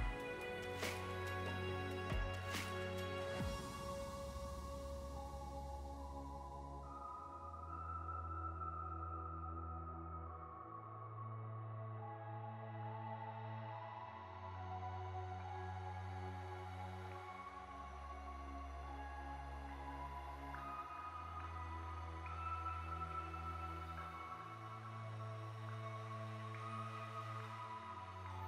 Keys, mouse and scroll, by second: 0.9 a, 1.9 m, 3.8 click, 4.7 l, 5.4 g, 6.5 Escape, 7.0 middle click, 7.9 click, 8.3 middle click, 8.9 g, 10.1 Escape, 10.2 middle click, 10.8 p, 12.0 Tab, 12.2 click, 12.6 g, 13.1 Escape, 13.3 middle click, 14.0 `, 14.6 shift+middle click, 14.8 scroll up 2, 15.0 shift+middle click, 15.8 click, 16.1 Tab, 16.6 click, 17.8 click, 18.3 click, 21.2 scroll down 4, 21.4 scroll up 3, 21.9 click, 22.1 click, 22.1 click, 24.5 middle click, 25.7 click, 26.4 Tab, 27.7 click, 27.9 click, 27.9 scroll down 3, 28.1 middle click.